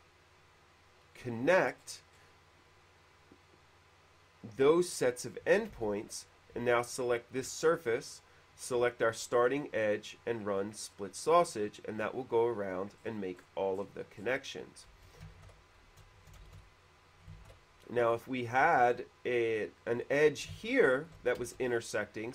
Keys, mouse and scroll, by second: 2.1-2.6 scroll up 2, 5.5 middle click, 5.6 scroll up 1, 5.8 space, 6.1 click, 7.1 shift+click, 9.7 click, 10.7 scroll up 1, 10.9 middle click, 13.2 middle click, 14.0 middle click, 14.4 middle click, 15.5 ctrl+z, 16.8 e, 16.9 click, 17.6 ctrl+z, 18.3 middle click, 18.9 q, 19.6 click, 20.5 click, 20.9 shift+middle click, 21.4-22.1 typing, 21.9 middle click.